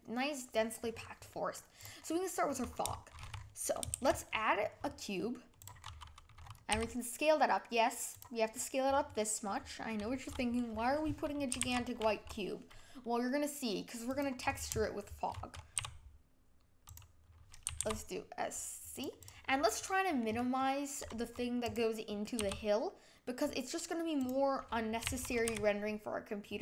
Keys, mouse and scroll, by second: 0.9-1.3 scroll down 5, 1.3-1.8 middle drag, 1.8 drag, 2.0-2.4 middle drag, 2.4 scroll down 5, 2.9-3.2 shift+middle drag, 3.2 scroll up 3, 5.6 shift+a, 5.9 scroll up 3, 6.3-6.7 scroll down 6, 6.7 s, 8.4 scroll up 1, 8.5-9.0 middle drag, 9.0 scroll down 4, 9.4-11.5 middle drag, 11.5 s, 14.4-14.8 scroll up 6, 14.8 shift+middle click, 15.3-15.7 scroll down 4, 15.7 s, 17.7 s, 19.2 click, 19.5 scroll up 5, 19.7 middle click, 20.2-20.6 scroll down 7, 20.6-21.7 middle drag, 21.7 click, 22.4 s, 25.0 s.